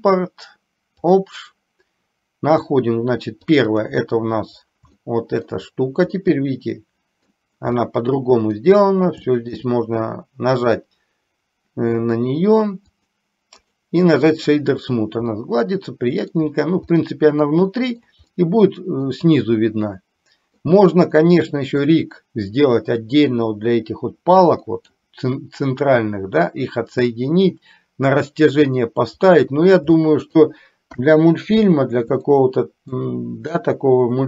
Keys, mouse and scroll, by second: 5.1 shift+middle click, 6.3-7.3 middle drag, 7.8 middle click, 9.3 shift+middle click, 10.7-12.3 right drag, 13.1 click, 13.7-14.7 right drag, 15.3-16.3 middle drag, 17.1 middle click, 17.8 shift+middle click, 18.4 middle click, 19.9 middle click, 21.2 middle click, 24.7 middle click, 29.3 middle click, 30.1 shift+middle click, 30.9 KP_3, 32.3 middle click.